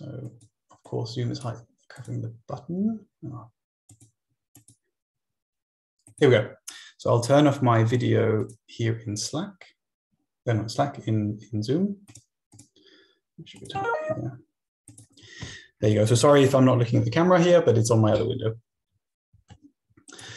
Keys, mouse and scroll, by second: 0.2 click, 0.9 click, 1.9 click, 3.9 click, 4.6-6.6 drag, 8.4 click, 12.1 click, 13.6 click, 14.9 click, 18.7 Left, 19.3 Up, 20.0 click.